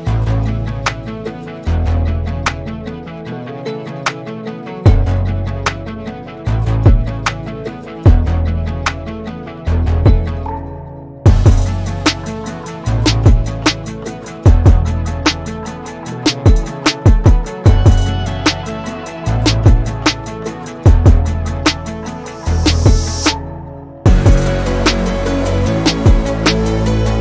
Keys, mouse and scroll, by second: 4.1-5.8 shift+middle drag, 5.8 click, 6.4-6.8 middle drag, 6.8 scroll up 3, 7.0-8.6 middle drag, 8.6 click, 8.8 scroll down 2, 9.0-10.1 middle drag, 10.1 scroll down 2, 10.3-12.7 middle drag, 12.7-13.0 scroll up 2, 13.0 click, 13.8 Tab, 14.9 scroll up 2, 15.4 3, 15.6 middle click, 16.2-16.8 scroll up 1, 16.8 1, 17.4 alt+click, 18.0 f, 18.8 alt+click, 19.4 f, 19.7 Tab, 20.3 Tab, 20.8 3, 21.0 click, 21.5 shift+click, 22.0 click, 23.0 Tab, 23.4-24.1 scroll down 4, 23.6 middle drag, 24.1-25.3 middle drag, 25.3 scroll up 1, 25.6-26.7 middle drag, 26.7 click.